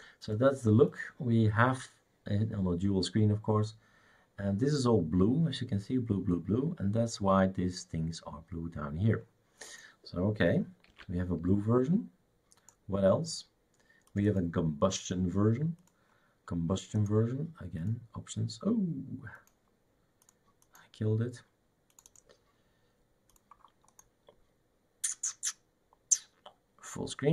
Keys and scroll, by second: 10.9 shift+super+q.